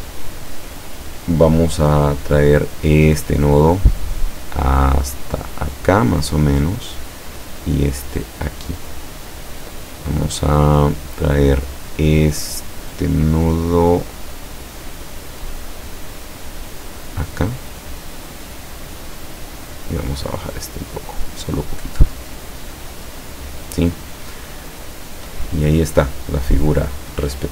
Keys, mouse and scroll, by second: 4.2-7.0 drag, 7.7-9.8 drag, 16.9-19.1 drag, 20.2-23.4 drag.